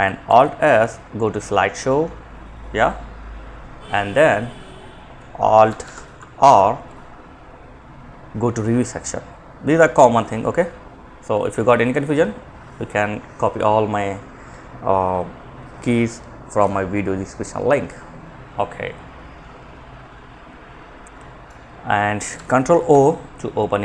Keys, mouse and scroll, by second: 4.9 Escape, 5.7 alt+r, 20.7 Escape, 22.1 ctrl+o.